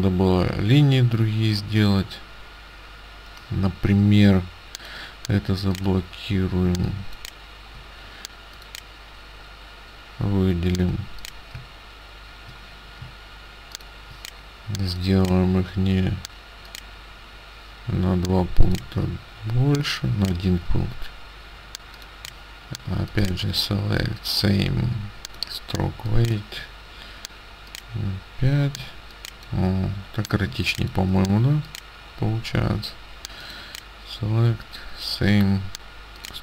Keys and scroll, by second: 6.7 space, 20.3 space, 25.9 space, 28.9 space, 30.6 space.